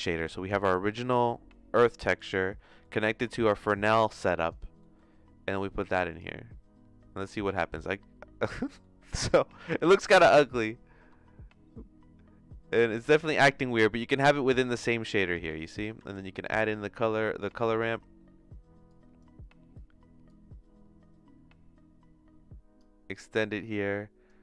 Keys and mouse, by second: 0.4 middle click, 1.1-2.3 drag, 3.2 click, 4.0 click, 5.0 middle click, 5.6 click, 9.4 middle click, 10.6-15.3 drag, 15.6 click, 16.0 shift+a, 18.8 click, 20.2-22.8 drag, 23.5 click.